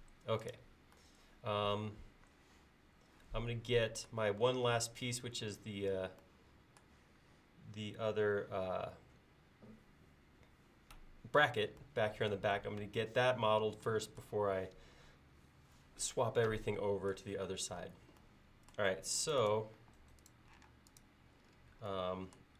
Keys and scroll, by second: 19.8 e.